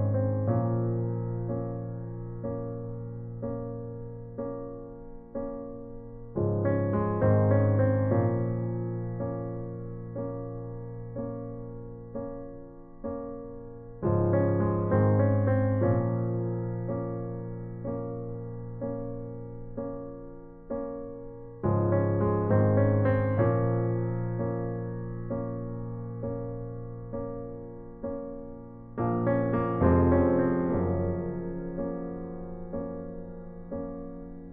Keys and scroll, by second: 29.4 ctrl+t, 33.0 alt+shift+Return.